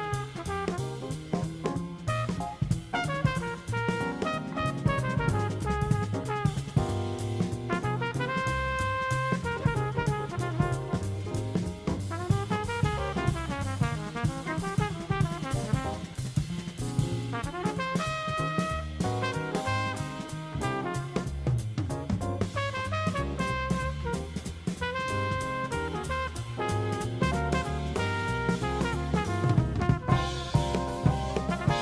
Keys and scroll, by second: 1.3 alt+super+space, 5.6 super+space, 7.7 super+space, 8.8 super+space, 14.8 super+c, 16.0 super+f, 20.7 shift+super+g, 27.8 super+space, 29.0 super+space.